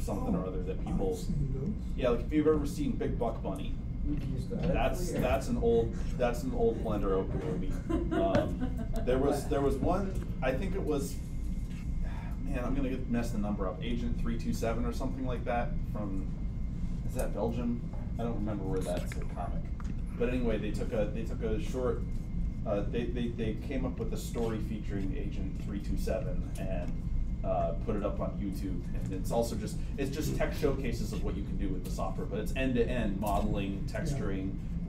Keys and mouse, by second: 3.5 click, 5.3-6.6 drag, 6.6-9.2 middle drag, 9.2 click, 9.6-14.1 middle drag, 14.1-18.3 drag, 18.3-24.4 middle drag, 24.4-26.0 drag, 26.0 middle click, 26.3-34.8 drag.